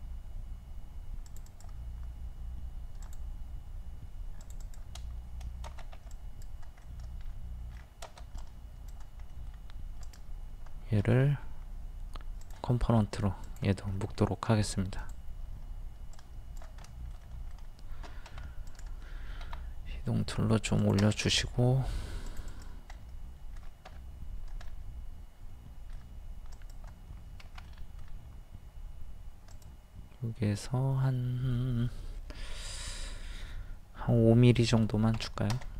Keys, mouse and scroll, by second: 6.0 space, 6.2 click, 6.8 middle click, 7.7-8.3 scroll down 1, 8.4 click, 9.4 middle click, 10.0 right click, 12.4 click, 14.0 middle click, 15.0 click, 16.9 middle click, 18.3 m, 20.8 click, 21.3 middle click, 22.3 click, 22.9-26.4 middle drag, 26.5 click, 27.4 Escape, 27.7 middle click, 29.5 click, 34.8 KP_5.